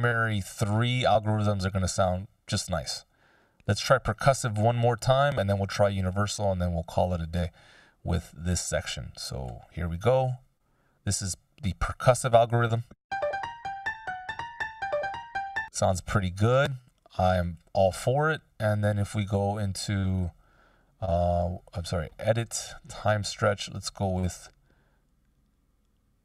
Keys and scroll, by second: 12.5 shift+space, 15.1 space, 15.9 super+z.